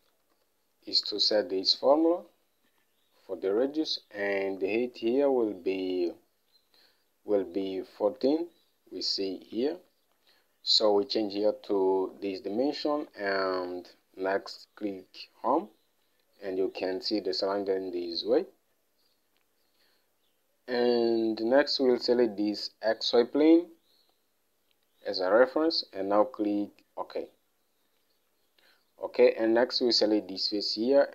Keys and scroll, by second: 0.0-3.0 typing, 5.2 alt+Tab, 10.3 alt+Tab, 12.1-13.0 typing, 14.9 Home.